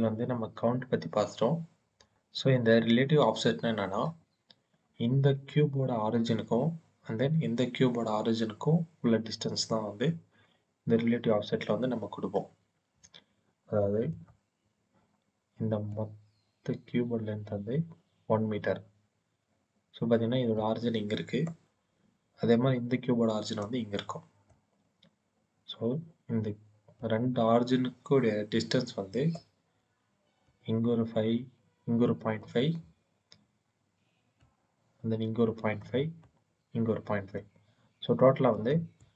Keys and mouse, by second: 14.1 middle click, 15.8 click, 20.4 click, 23.5 click, 26.8-29.3 drag, 30.3-32.3 drag, 34.2-35.7 drag, 36.1-37.3 drag, 38.4 click, 38.9 click.